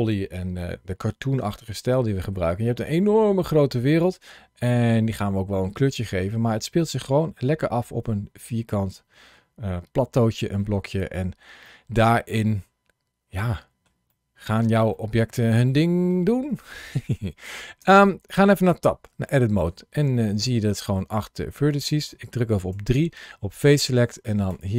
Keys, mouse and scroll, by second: 2.4 scroll down 2, 3.5 scroll up 2, 6.0-6.4 scroll down 1, 6.4 middle click, 9.8 scroll up 1, 11.0 middle click, 11.5 middle click, 13.9 middle click, 14.8 middle click, 15.5 middle click, 16.5 shift+middle click, 17.7 Tab, 19.1 shift+middle click, 19.8 middle click, 20.8 shift+middle click, 22.6 3, 24.3 click.